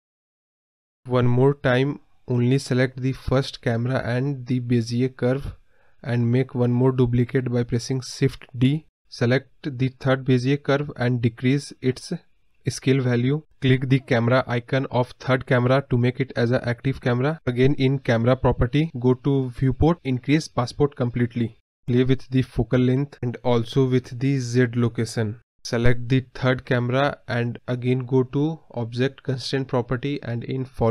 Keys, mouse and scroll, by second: 1.6-1.9 scroll up 2, 1.9-2.9 scroll down 2, 2.9 middle drag, 3.0-3.8 scroll down 8, 3.3 middle drag, 3.8-5.3 middle drag, 5.3 click, 6.7 shift+d, 8.3 click, 10.1-11.3 drag, 15.3 click, 15.9 KP_0, 17.6-21.9 drag, 21.9-22.5 scroll up 1, 22.5-23.6 scroll up 1, 23.6-25.0 drag, 27.7-30.9 drag.